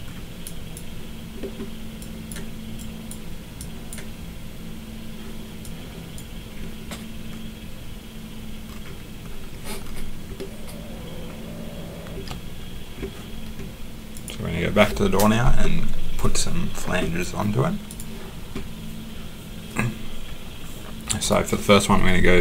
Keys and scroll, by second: 22.3-22.4 typing.